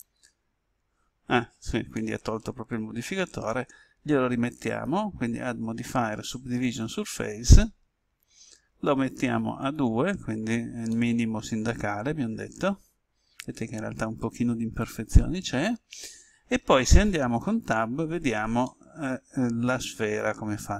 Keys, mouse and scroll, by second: 1.8-4.3 middle drag, 4.6 click, 10.9-15.3 middle drag, 17.5 Tab, 18.6-20.7 middle drag.